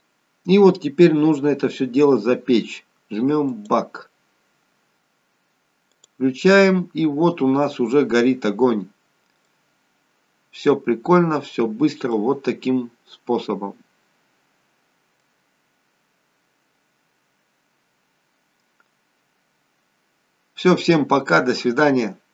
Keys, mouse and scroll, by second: 3.5 click, 5.9 click, 7.4-8.9 scroll up 2, 9.0-9.5 scroll up 2, 9.5 middle click, 11.2-12.1 scroll down 1, 12.1 middle click, 15.6-17.1 scroll down 2, 17.1-18.6 scroll up 1.